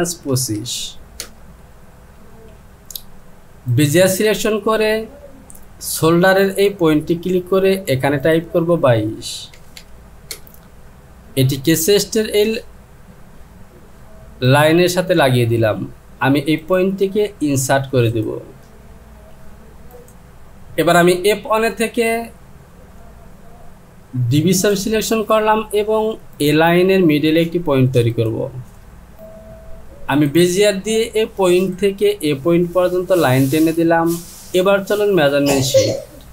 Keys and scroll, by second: 0.3 KP_2, 0.6 KP_5, 1.2 Return, 9.6 KP_2, 9.8 KP_2, 10.3 Return, 29.1 Return.